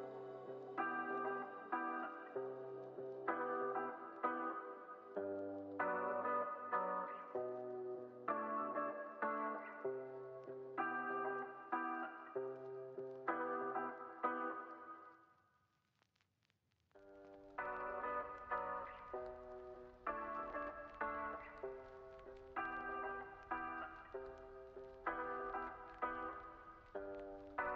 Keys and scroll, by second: 4.8 z.